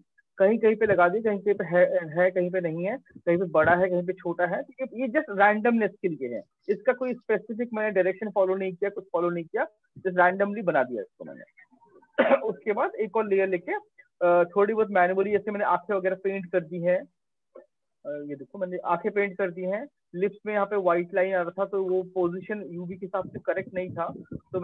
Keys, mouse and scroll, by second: 0.0 click, 0.1 click, 0.2 click, 0.7-1.5 click, 1.0 click, 1.2 click, 1.2 click, 1.6 click, 1.7 click, 1.8 click, 2.0 click, 2.2 click, 2.2 click, 2.4 click, 2.8 click, 3.0-3.5 click, 3.2 click, 3.3 click, 3.4 click, 3.6 click, 3.7 click, 3.8 click, 4.4 click, 4.6 click, 4.8 click, 5.0-9.1 click, 5.2 click, 5.3 click, 5.4 click, 10.6-11.0 click, 10.7 click, 12.2 click, 13.1 ctrl+0, 14.3 ctrl+click, 14.6 click, 14.9 click, 15.0 ctrl+click, 15.3 click, 16.3 click, 16.7 click, 17.0 click, 17.7 click, 18.4 click, 19.0 click, 22.8 click.